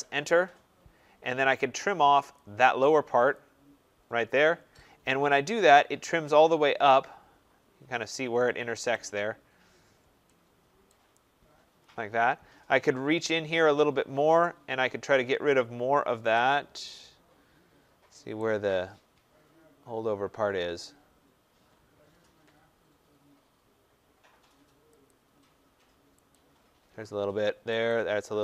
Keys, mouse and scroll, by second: 2.2 click, 3.2 click, 5.0 middle click, 5.1 middle click, 8.8 right click, 9.0 middle click, 9.1 middle click, 9.1 middle click, 9.6 middle click, 9.8 middle click, 9.9 middle click, 10.8 right click, 10.8-11.6 scroll, 11.6 middle click, 11.7 middle click, 12.0 middle click, 13.4 middle click, 15.8-16.3 scroll, 17.6 scroll, 18.2 right click, 18.7 middle click, 19.1 middle click, 25.0 click, 26.2 click.